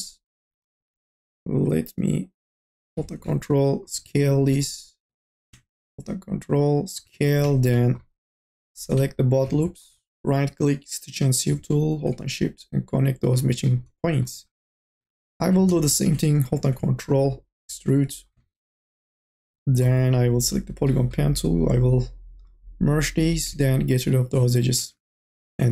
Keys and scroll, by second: 2.3-3.2 typing, 4.3 ctrl+z, 14.6 2, 15.1 e, 16.2 t, 21.1 1, 24.7 2, 25.2 e.